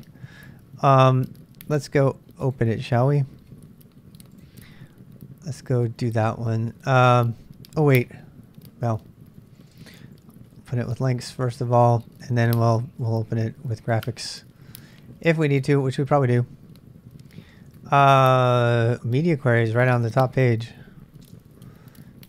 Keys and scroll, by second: 7.2 ctrl+[, 7.3 k, 8.9 ctrl+c, 9.1-10.3 typing, 17.5 space, 19.2 k, 21.2 space.